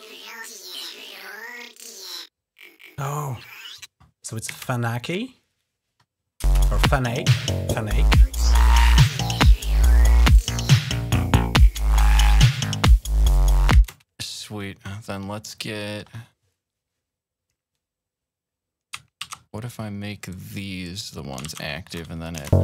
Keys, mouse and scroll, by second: 1.0 click, 2.2 click, 3.4 click, 4.4 space, 5.4 click, 6.3 space, 12.8 ctrl+scroll up 2, 13.6 space, 16.6-18.5 drag, 19.1 alt+1, 20.2 click, 21.3 1, 22.1 click, 22.2 space.